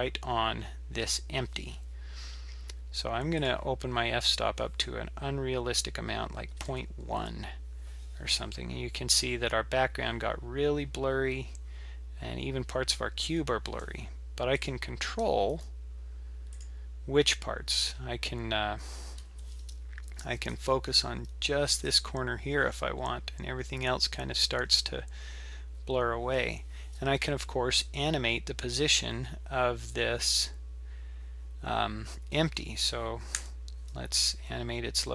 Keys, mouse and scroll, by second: 3.4 click, 14.6 click, 15.2 g, 17.8 g, 20.2 g, 22.6-23.1 scroll up 8, 24.1-25.2 scroll down 7, 25.2-28.1 scroll up 1.